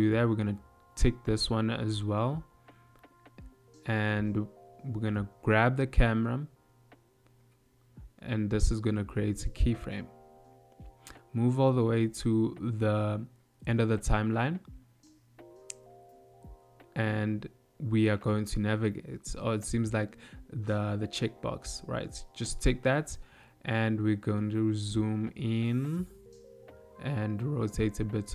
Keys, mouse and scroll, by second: 0.3 click, 4.5 g, 9.4 click, 10.6 click, 11.4 click, 15.7 ctrl+middle click, 18.7 shift+middle click, 19.4 n, 21.4 click, 22.2 n, 23.4 ctrl+middle click, 25.6 middle click.